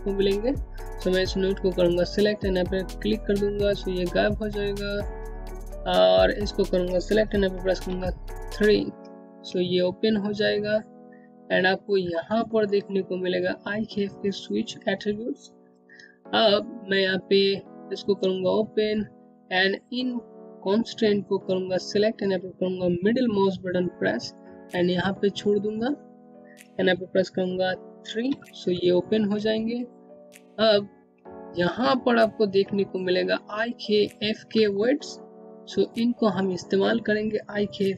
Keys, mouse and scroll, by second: 2.4 click, 5.6 click, 7.2 3, 8.9 click, 10.6-11.5 scroll up 1, 11.5 middle click, 14.6-15.4 scroll down 1, 15.5 alt+middle click, 18.2 click, 20.9 middle click, 26.3 3, 27.9 click, 29.1 scroll up 1, 37.2 scroll down 1.